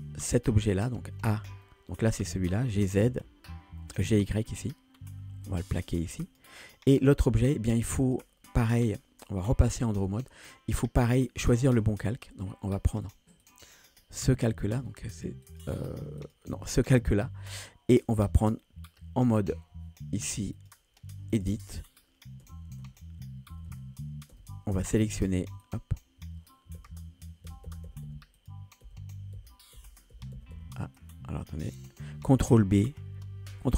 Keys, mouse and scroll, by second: 0.3 click, 1.4 a, 1.7-2.7 middle drag, 2.7 scroll up 1, 3.1 g, 8.0-10.0 drag, 10.9-17.5 drag, 18.4 middle click, 20.6-21.5 drag, 22.5-24.3 typing, 25.2 middle drag, 25.7 click, 26.8-30.6 typing, 28.4 click, 31.0-31.8 drag.